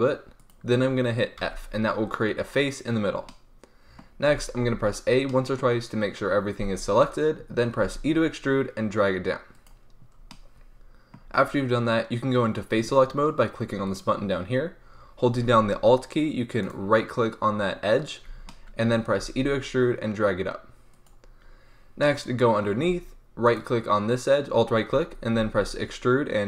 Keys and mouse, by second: 0.5-3.2 drag, 1.3 f, 4.2 a, 4.6 a, 7.7 e, 9.6-10.6 middle drag, 10.8 middle click, 11.2 middle click, 18.4 middle click, 19.1 e, 22.0-23.4 drag, 23.4-25.3 right drag, 25.3 middle click, 25.3 e.